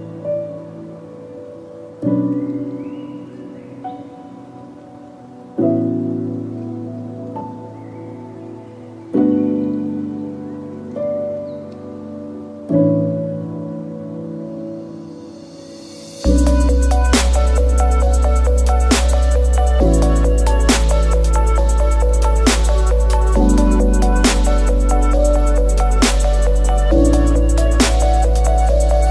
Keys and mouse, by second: 0.0 shift+middle drag, 0.5 click, 0.6 Tab, 1.5 middle click, 2.1 shift+middle click, 2.7 middle click, 3.6 shift+middle click, 4.0 middle click, 4.5 click, 4.7 alt+click, 5.0 ctrl+e, 5.6-8.6 typing, 6.0 middle click, 11.1 a, 11.4-14.4 middle drag, 15.1 middle click, 16.2 shift+middle click, 17.9 alt+click, 18.3 ctrl+e, 19.0 a, 20.3 a, 20.6 u, 21.0 a, 23.5-25.6 middle drag, 26.4 ctrl+z, 26.6 ctrl+z, 28.3 ctrl+z.